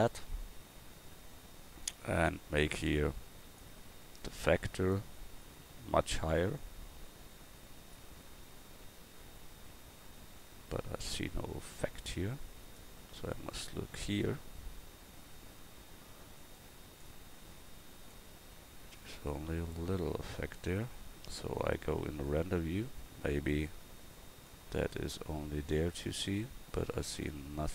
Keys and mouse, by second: 20.3-26.7 drag.